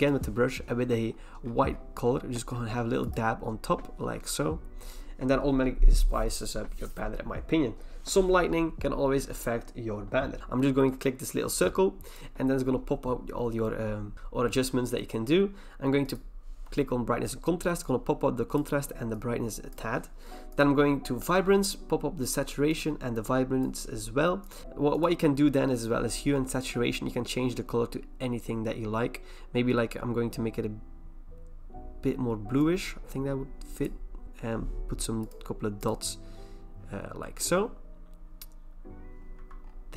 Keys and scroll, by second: 4.1 v, 39.3 v.